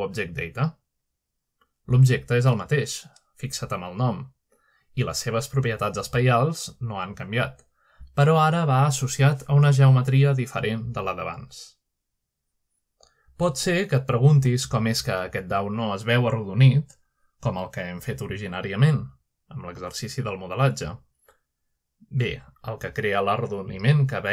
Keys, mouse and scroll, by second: 0.5-1.5 middle drag, 3.3 click, 3.9 click, 4.5 click, 8.3 click, 9.0 click, 9.0-10.0 scroll down 1, 10.0-11.1 scroll down 1, 11.1-11.8 scroll down 1, 11.8-13.2 scroll down 1, 14.4-17.0 scroll down 1, 17.4-18.3 middle drag, 18.6 shift+middle click, 21.9 middle click.